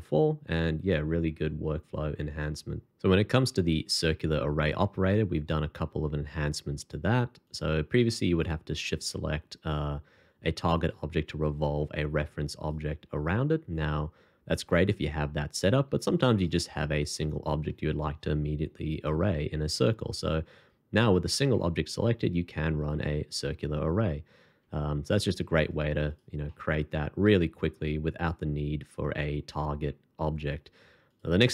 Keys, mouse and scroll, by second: 8.2 shift+click, 11.4-11.9 scroll up 1, 15.9 x, 21.5 shift+2, 23.3 alt+c, 24.8-25.5 shift+scroll up 2, 26.1 double click, 26.4 middle click.